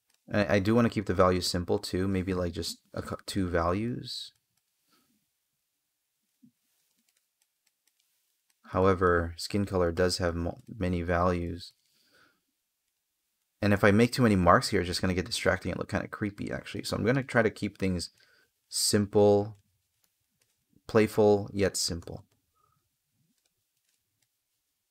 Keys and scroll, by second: 8.3 space, 13.3 space, 16.4 space, 18.9 space.